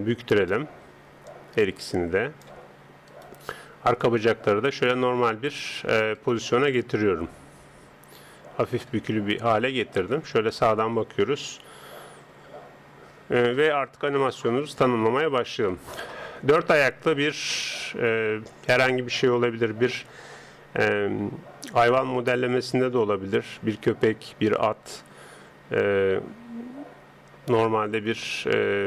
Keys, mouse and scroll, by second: 0.4 right click, 1.3 click, 3.1 right click, 4.0 click, 6.2 right click, 6.7 click, 10.0 KP_3, 19.1-21.3 middle drag, 21.9-23.7 middle drag, 28.3 KP_3.